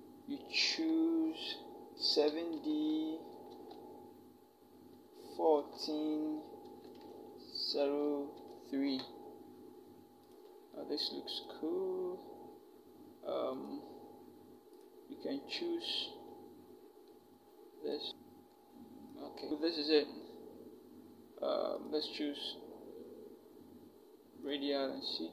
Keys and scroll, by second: 2.4 7, 3.3 d, 5.4 1, 6.4 4, 7.5-8.1 typing.